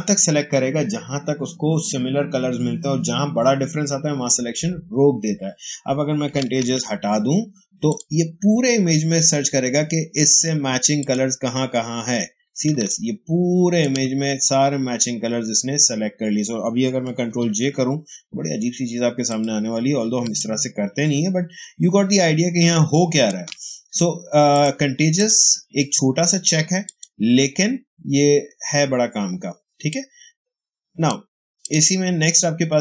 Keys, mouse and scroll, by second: 6.3 click, 6.5 ctrl+d, 7.8 click, 10.9 click, 12.6 ctrl+space, 12.8-16.2 ctrl+drag, 16.5 ctrl+click, 17.2 ctrl+j, 19.2 click, 19.9 space, 20.3-24.4 ctrl+drag, 29.8-31.5 drag.